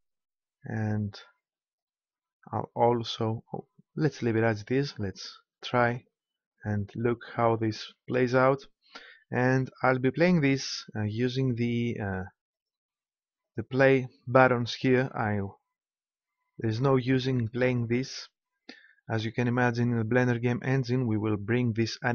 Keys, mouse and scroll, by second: 12.5-15.1 drag.